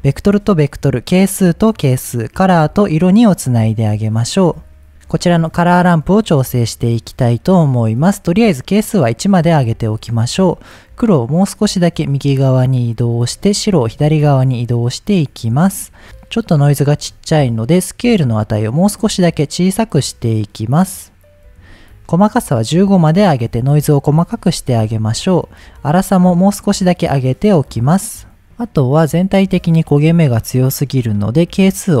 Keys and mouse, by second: 1.2-1.8 drag, 2.5-3.7 drag, 5.4 middle click, 7.5 middle click, 8.8 click, 10.4-13.1 drag, 13.8-14.5 drag, 15.0 click, 18.2-21.6 drag, 22.3-24.0 drag, 25.9 click, 26.7-28.3 drag, 28.3-30.1 middle drag, 31.3-32.0 drag.